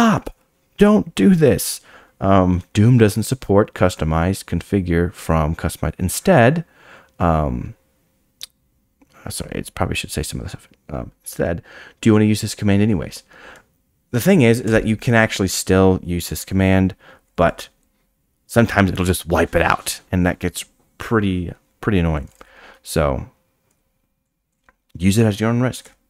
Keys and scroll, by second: 16.5 Escape.